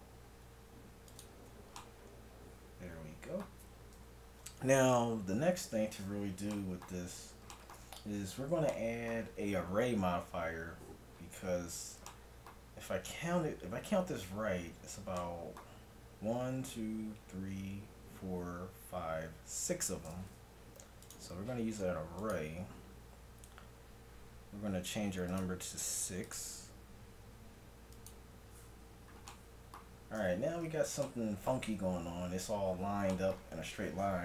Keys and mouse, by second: 1.9-3.3 middle drag, 4.0 KP_1, 8.3 a, 21.0-22.9 drag, 22.9-25.3 middle drag, 25.3-29.7 drag, 29.7-30.7 middle drag, 30.7 z, 32.1 z, 33.3 z.